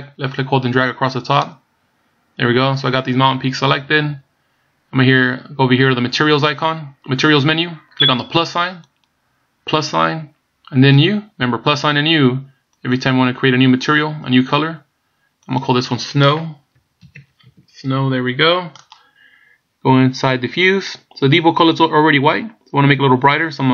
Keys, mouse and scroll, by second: 9.0 click, 12.7 click, 15.5 click, 20.7 click.